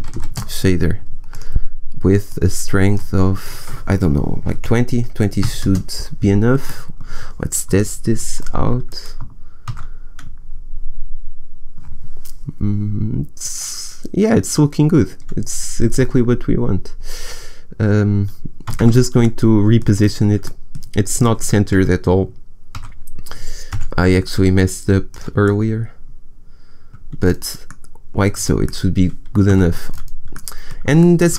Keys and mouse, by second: 0.1 s, 2.2-5.2 drag, 6.6-7.6 drag, 7.6 KP_0, 9.5 KP_0, 9.7 shift+z, 20.8 shift+z, 21.6 shift+z, 21.9 g, 29.4 a.